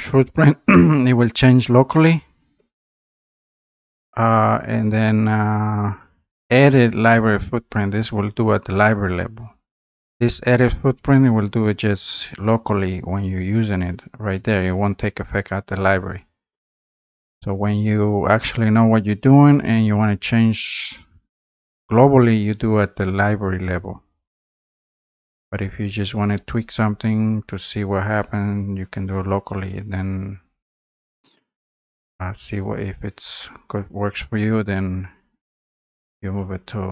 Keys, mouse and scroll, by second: 1.3 click, 15.7 click, 34.3-36.9 drag.